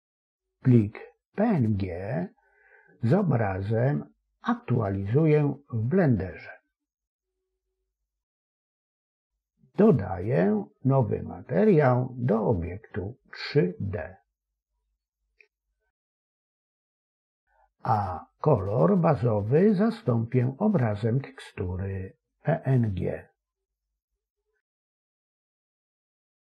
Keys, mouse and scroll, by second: 13.2 click, 18.2-20.3 drag, 24.5-25.9 drag.